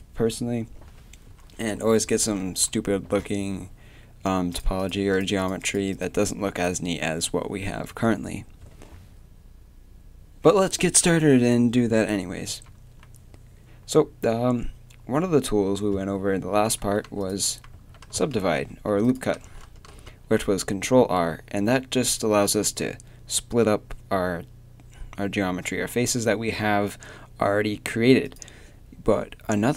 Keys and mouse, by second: 4.5-12.5 right drag, 12.5 a, 17.2-18.4 right drag, 17.7 a, 18.4 ctrl+r, 19.8 ctrl+r, 28.4-29.7 middle drag.